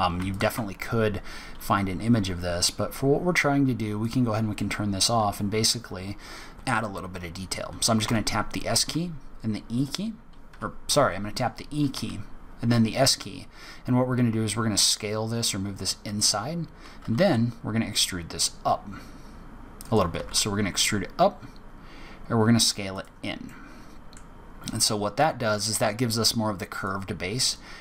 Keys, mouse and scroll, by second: 0.2 alt+click, 0.9-1.4 scroll up 4, 2.0-2.4 scroll down 1, 3.2-3.6 scroll down 2, 3.9 click, 8.0 s, 10.8 e, 16.9 e, 23.4 middle click, 24.4-24.8 scroll down 3, 24.8 middle click, 26.8 click.